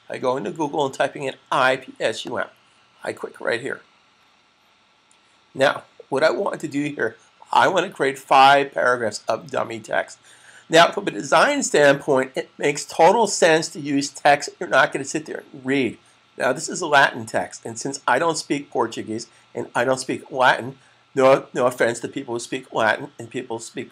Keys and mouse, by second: 2.0 click.